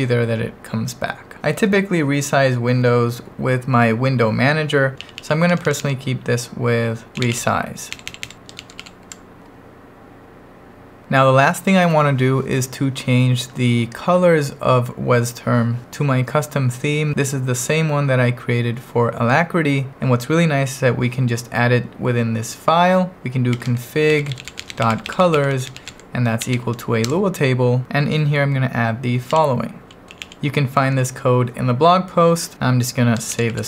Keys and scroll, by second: 5.0 l, 5.5 h, 6.9-9.3 typing, 23.5-26.6 typing, 23.7 Return, 27.1 Return, 27.8 k, 29.1-30.6 typing, 33.1-33.6 typing.